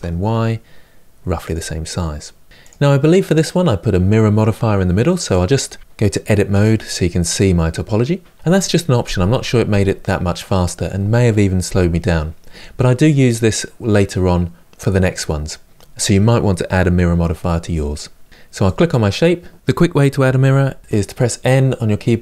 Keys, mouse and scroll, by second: 2.5 click, 6.3 Tab, 18.3 Tab, 18.4 click, 20.4 n.